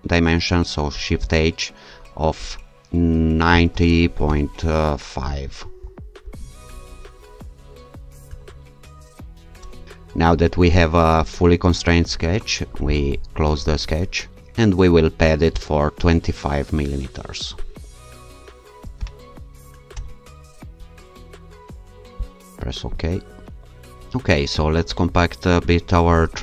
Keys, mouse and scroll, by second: 1.2 shift+h, 3.2-4.2 typing, 5.3 5, 5.8 0, 6.2 ,, 8.3 5, 9.6 Return, 9.8 click, 12.9 click, 15.6 click, 18.8 2, 19.2 5, 19.9 Return, 22.3 click.